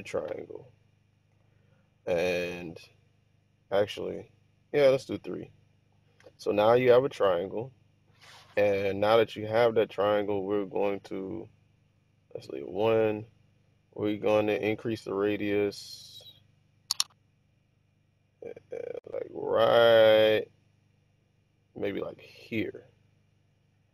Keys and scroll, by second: 12.2 1.